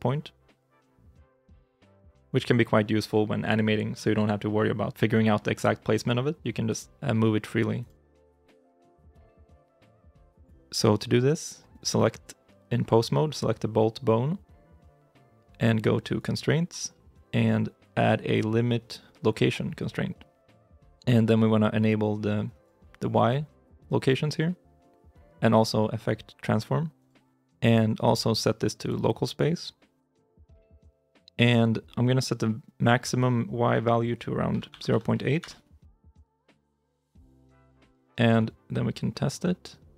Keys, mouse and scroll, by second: 2.1 ctrl+z, 6.6 g, 10.4 ctrl+z, 34.7 typing, 35.3 Return, 39.9 g.